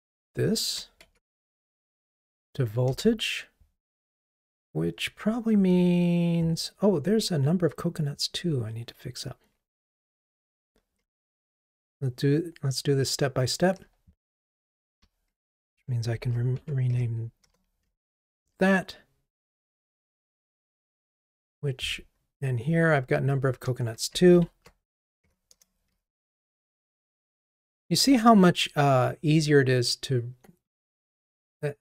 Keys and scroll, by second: 0.3 shift+F6, 11.2 ctrl+r, 18.1 ctrl+r, 26.1 ctrl+r.